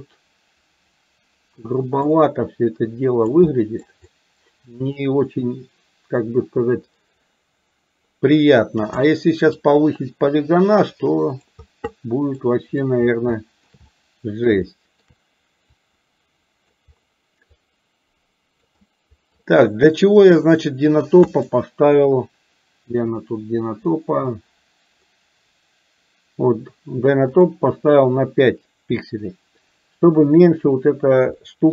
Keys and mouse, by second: 2.0-3.4 drag, 3.5 middle click, 4.1-8.9 drag, 9.0 middle click, 10.1-11.5 drag, 12.0 middle click, 12.5 middle click, 13.4 shift+middle click, 13.9 middle click, 14.6 shift+middle click, 15.8-16.8 drag, 17.5-18.8 drag, 18.9 middle click, 20.1 click, 21.4 middle click, 27.5-30.1 drag, 31.4 middle click.